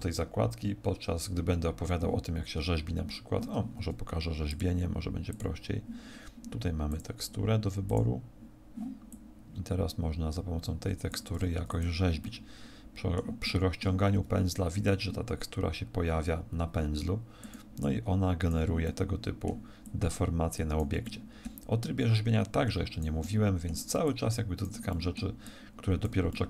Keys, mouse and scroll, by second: 4.4 click, 7.9 click, 9.2 click, 12.2 click, 12.2 middle click, 13.4 middle click, 14.1 f, 17.5 click, 17.9 click, 18.9 middle click, 20.0 click, 21.1 middle click, 22.0 click, 23.2 middle click, 24.2 click, 24.9 middle click, 25.5 click, 26.3 middle click.